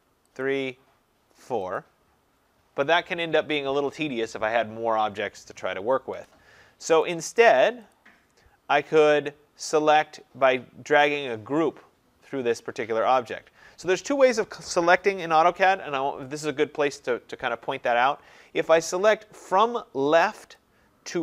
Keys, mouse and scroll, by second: 0.5 click, 6.2 Escape, 7.1 right click, 8.0 click, 20.6 click.